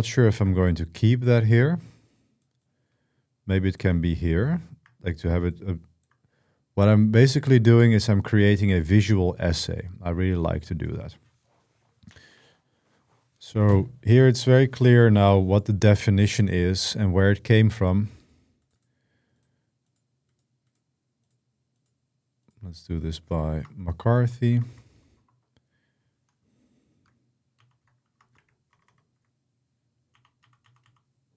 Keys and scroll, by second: 23.4 space, 23.8 shift+m, 24.3 BackSpace, 24.4 BackSpace, 27.3 Insert, 27.9 space, 28.1 b, 28.5 BackSpace, 28.6 BackSpace, 29.9 Insert, 30.2 Insert, 30.4 Insert, 30.6 Insert.